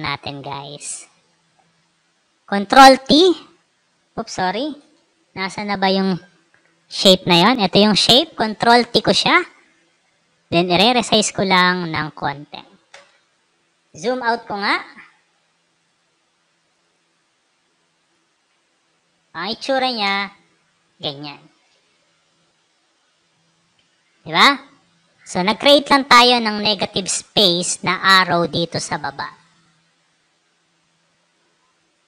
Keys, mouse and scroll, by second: 2.8 ctrl+t, 4.7 Return, 6.5 click, 7.3 click, 8.7 ctrl+t, 10.1-11.5 drag, 12.8 Return, 13.6 click, 14.5 alt+scroll up 2, 15.7 click, 16.5 click, 17.9 click, 18.7 alt+scroll up 2, 20.0 space, 20.1-21.5 drag, 23.3 alt+scroll up 2.